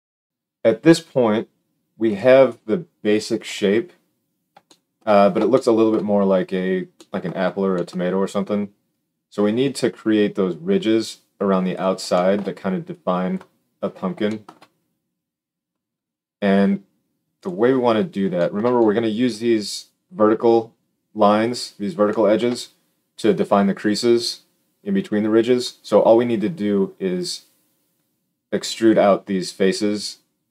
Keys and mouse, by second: 0.2-2.5 drag, 2.5-8.8 middle drag, 3.4 KP_Decimal, 8.8-17.4 drag, 17.4-18.6 middle drag.